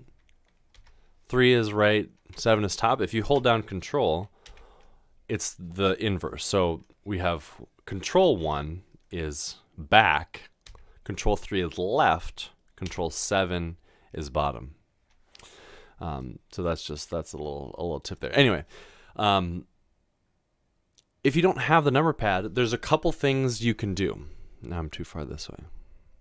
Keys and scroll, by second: 0.7 typing, 2.3 typing.